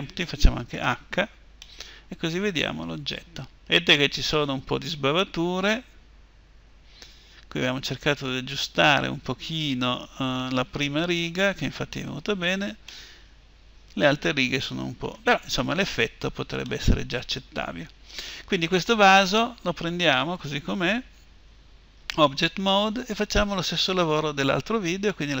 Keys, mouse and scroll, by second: 0.4 h, 1.3-3.4 middle drag, 4.9 middle click, 9.7 click, 12.6-14.6 middle drag, 15.2 scroll up 1, 15.4-18.3 middle drag, 19.4-25.4 right drag.